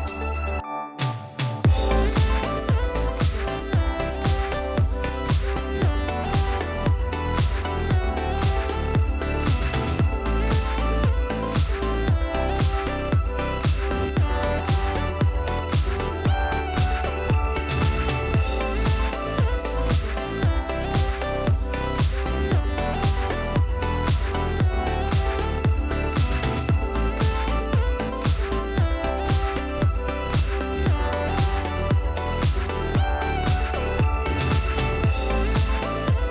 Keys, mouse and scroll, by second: 1.3 click, 4.2 click, 8.2 click, 9.8 ctrl+shift+9, 13.6-14.0 ctrl+scroll up 2, 16.3 5, 18.6 click, 19.5-20.3 drag, 20.4 ctrl+z, 21.1-22.7 drag, 22.7 ctrl+z, 24.3 ctrl+d, 26.4 shift+click, 27.1-28.3 shift+drag, 28.7 shift+click, 29.2 ctrl+shift+z, 29.7-30.6 ctrl+shift+drag, 30.6 ctrl+z, 33.7 click.